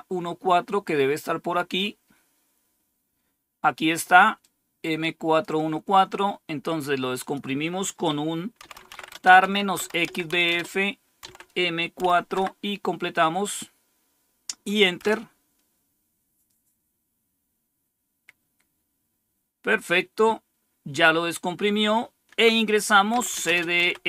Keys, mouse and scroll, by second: 4.3-5.4 drag, 5.7 click, 5.8-6.6 scroll down 1, 7.1 click, 8.3-11.9 typing, 12.2 Tab, 14.9 Return, 22.8-24.0 typing.